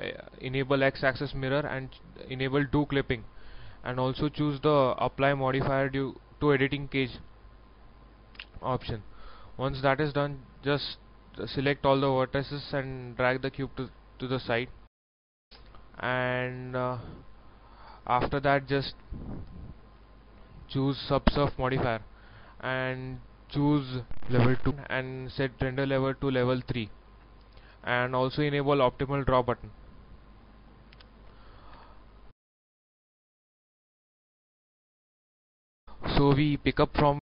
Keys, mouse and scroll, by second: 2.7 click, 7.7 middle click, 8.7 scroll down 1, 9.3 scroll up 1, 9.5 scroll down 1, 11.4 a, 11.7 a, 13.2-14.4 drag, 14.8 middle click, 17.3-18.4 drag, 21.6 shift+middle click, 24.2 click, 29.5 scroll down 1, 30.1-31.4 middle drag, 31.7 KP_1, 35.8 scroll up 1, 36.0 scroll down 1.